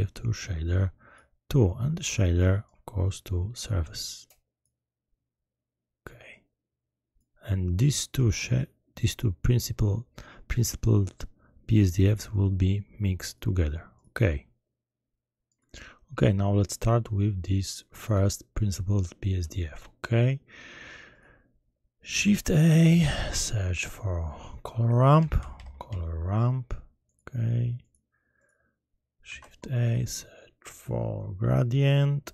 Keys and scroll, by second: 22.2 shift+a, 25.2-25.8 typing, 29.2 shift+a.